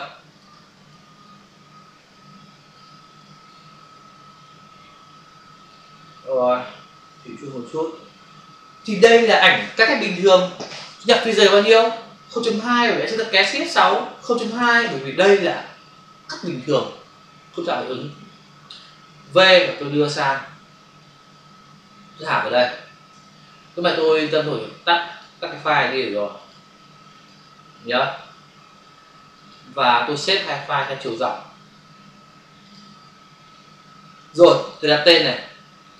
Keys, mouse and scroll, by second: 0.3 click, 0.8 click, 1.1 click, 1.3 double click, 2.0 click, 3.2 click, 3.7 click, 7.1 click, 13.4 shift+F6, 14.1-15.1 typing, 18.0 Return, 19.2 v, 19.8 click, 23.7 click, 27.1 click, 27.3 double click, 29.3 click, 30.7 click, 32.6 click, 34.7 click, 35.9 click.